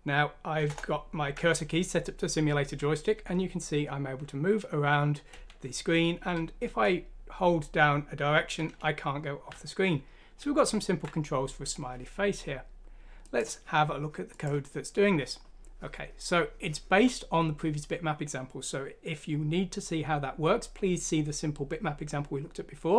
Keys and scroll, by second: 0.7 Return.